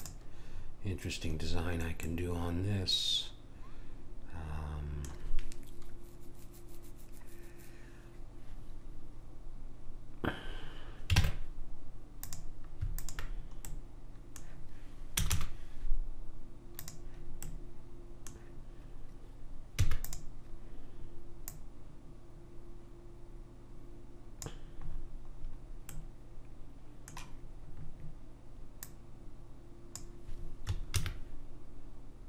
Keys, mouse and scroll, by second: 11.1 ctrl+Tab, 13.0 click, 13.7-16.8 middle drag, 15.2 i, 17.5-19.8 middle drag, 19.8 e, 21.4 click, 25.4-28.8 middle drag, 28.8 click, 30.9 ctrl+b.